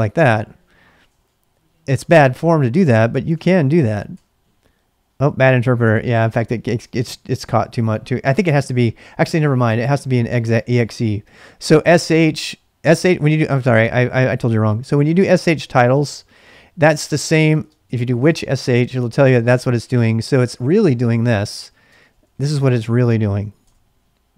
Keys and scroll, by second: 0.3-3.7 typing, 4.1 Return, 11.3-14.4 typing, 17.0-18.5 typing, 19.9-24.1 typing.